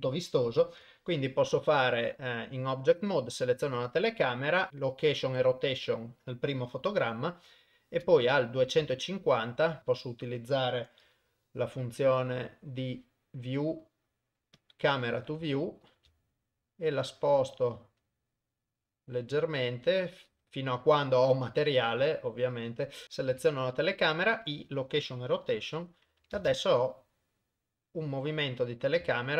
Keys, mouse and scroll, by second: 2.5 middle click, 7.4 shift+Right, 9.6 shift+middle click, 11.2 n, 13.1 click, 14.6 click, 15.5 n, 16.4-19.4 shift+middle drag, 19.4 shift+click, 19.8 shift+middle click, 23.0 click, 23.4 i, 25.7 shift+Left, 26.5 shift+space.